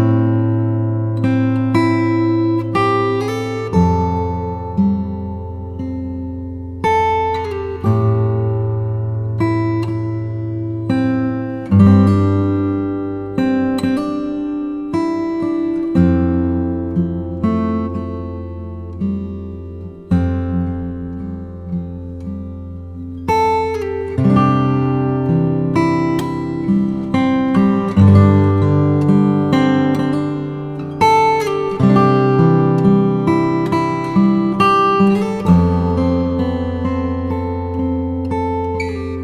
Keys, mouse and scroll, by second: 3.2-5.8 drag, 5.8 s, 8.8-10.1 scroll up 4, 10.4 click, 11.2-12.1 scroll up 1, 12.1 s, 15.0 click, 16.5-17.3 drag, 17.3-18.1 scroll up 4, 18.1 alt+click, 18.8 alt+shift+click, 19.3-20.8 middle drag, 20.8 ctrl+b, 26.4-26.8 scroll down 1, 26.8-29.8 middle drag, 29.8 click, 30.3-32.0 scroll down 7, 32.0 g, 37.1 middle click, 37.8-38.7 scroll up 2, 38.7-39.2 shift+middle drag.